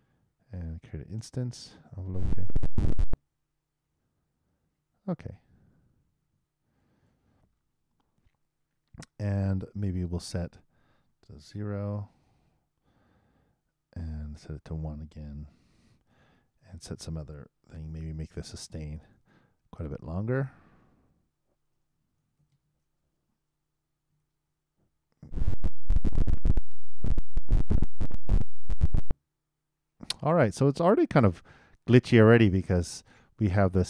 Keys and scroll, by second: 0.4 super+Return, 2.0 super+Return, 11.8 super+0, 12.1 super+Return, 24.4 super+3, 25.2 super+Return.